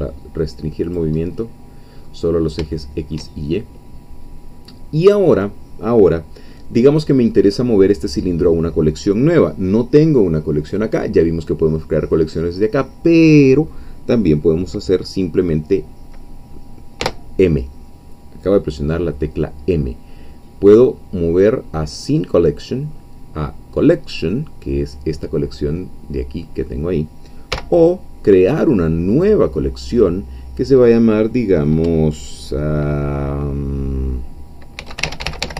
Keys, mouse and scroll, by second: 0.9 click, 1.2-2.4 middle drag, 2.4 scroll up 2, 2.8 shift+middle click, 17.0 m, 27.6 m, 29.1-31.8 drag, 34.6-35.5 typing.